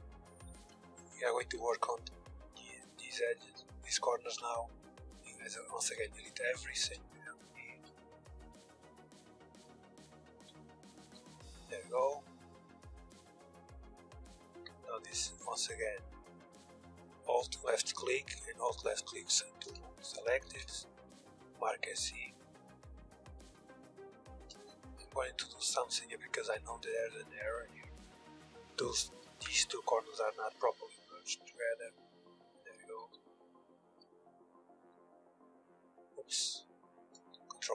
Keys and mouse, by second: 0.3 KP_3, 0.8 KP_1, 1.2 z, 1.7-4.3 drag, 2.9 z, 3.8 Tab, 4.8-10.0 typing, 11.2-12.3 middle drag, 12.3 click, 13.6 click, 14.0-18.1 middle drag, 20.0 ctrl+e, 21.5 a, 22.2 b, 23.7 b, 24.5 w, 28.9 a, 29.1 b, 29.7 w, 31.8-34.3 typing, 35.7 ctrl+z, 36.7 ctrl+e.